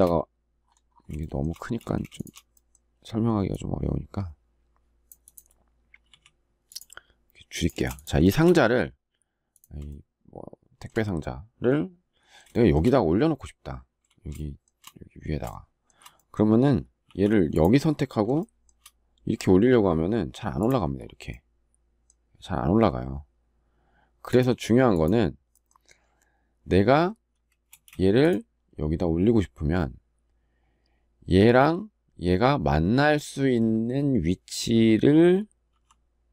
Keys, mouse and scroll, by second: 0.9 shift+middle click, 1.5 space, 1.9 shift+click, 5.8 s, 7.5 space, 8.0 shift+middle click, 9.6 shift+middle click, 12.2 shift+middle click, 14.1 shift+middle click, 15.2 shift+middle click, 16.8 m, 18.1 shift+middle click, 27.4 space.